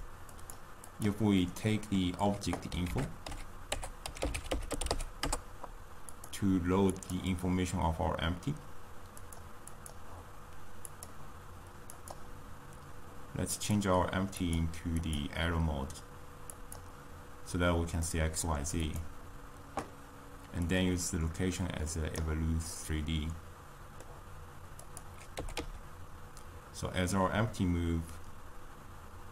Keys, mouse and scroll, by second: 0.8 click, 11.3 click, 13.7 click, 16.7-18.1 drag, 18.1-19.0 middle drag, 19.0 click, 22.5 click, 22.7-25.0 middle drag, 25.0 click, 25.6 g.